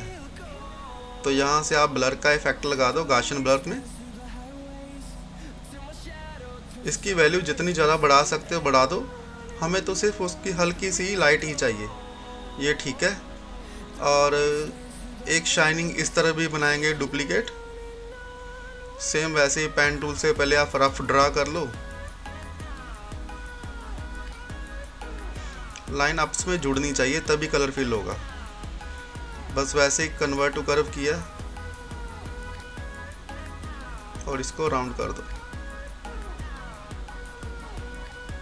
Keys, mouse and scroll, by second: 3.8-7.8 drag, 12.8 scroll up 1, 15.1 click, 15.8 scroll up 1, 17.2 click, 23.0 scroll up 1, 26.6 click, 27.2 scroll down 1, 28.2-38.4 drag.